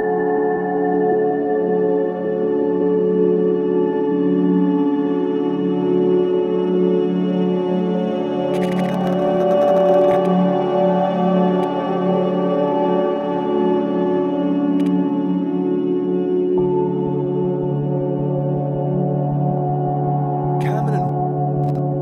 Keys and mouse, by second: 1.0 click, 2.5 alt+click, 3.5 click, 4.3-5.4 typing, 6.4 Escape, 7.8-12.4 drag, 11.6 typing, 12.9 typing, 13.8 click, 14.8-16.0 drag, 16.5-16.9 typing, 18.2 click, 18.9-19.8 typing, 19.5 click, 21.0-22.0 typing, 21.6 click.